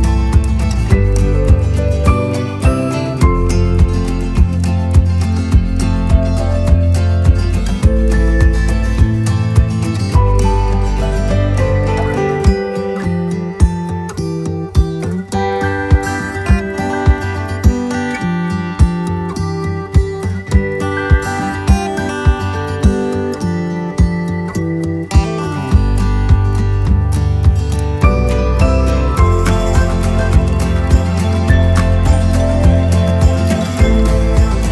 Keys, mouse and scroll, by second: 2.6 click, 3.0-3.7 scroll up 1, 4.0 right click, 5.8 click, 8.3-13.8 drag, 14.2-15.4 right drag, 16.4 click, 17.4 click, 18.0 right click, 19.6 click, 20.8 right click, 21.8 right click, 23.9-29.0 drag, 29.6 right click, 31.8-34.0 drag.